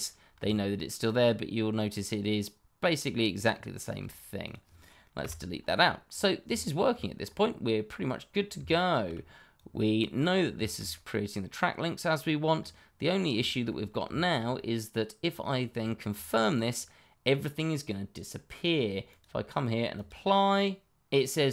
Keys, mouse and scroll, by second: 0.1 scroll down 1, 0.4 shift+middle click, 4.4 click, 5.2 Delete, 6.0 scroll down 1, 6.5 shift+middle click, 7.2 scroll up 1, 8.4 scroll down 1, 8.6 shift+middle click, 9.5 click, 10.3 scroll down 1, 10.6 shift+middle click, 10.9 middle click, 12.1 scroll up 1, 13.4 shift+middle click, 13.5 middle click, 13.6 shift+middle click, 14.3 shift+middle click, 14.8 middle click, 15.8 shift+middle click, 15.8 middle click, 15.9 shift+middle click, 19.0 click.